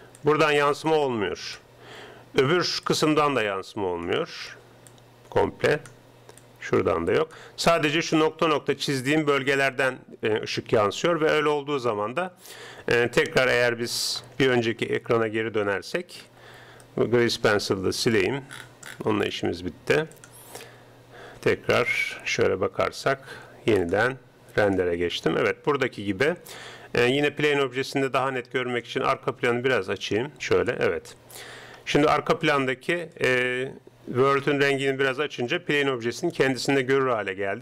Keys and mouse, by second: 0.0-10.6 typing, 0.2-2.8 drag, 3.0-4.6 drag, 4.9-8.8 drag, 14.6 ctrl+Up, 18.2 n, 20.7 n, 21.8 KP_0, 24.8 click, 25.9 middle click, 28.8-30.6 drag, 32.1 middle click, 33.1 middle click, 37.1 middle click.